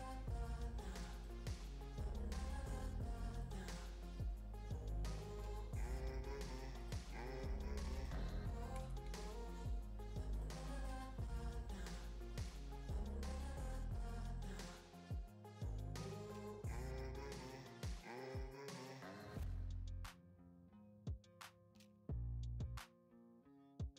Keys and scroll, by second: 8.7 BackSpace, 9.1 2.